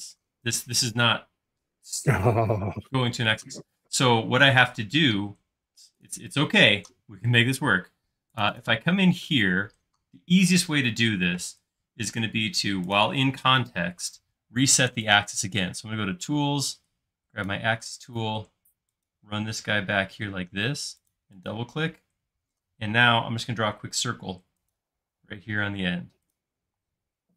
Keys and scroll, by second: 23.5 c, 26.8 space.